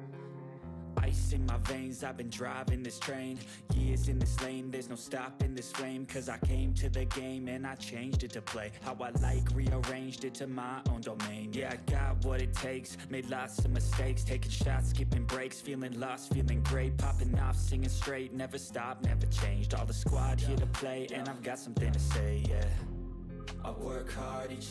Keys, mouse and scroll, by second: 0.0-0.6 typing, 2.0-3.1 typing, 6.7 typing, 8.3 click, 8.4 click, 9.4-9.9 scroll up 1, 9.9 click, 10.6-12.5 typing, 13.2 Right, 13.6-16.1 typing, 16.8 click, 18.9 ctrl+v, 19.7 scroll down 1, 21.5 scroll down 1, 21.5 click, 22.2 Return, 22.7 ctrl+v, 23.9 click, 24.5 shift+,.